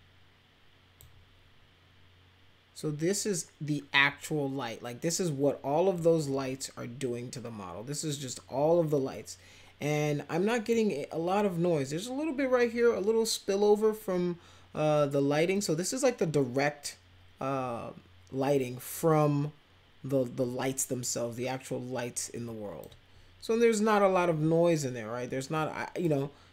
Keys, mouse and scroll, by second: 5.9-10.7 drag, 15.5-22.8 drag, 25.5 click.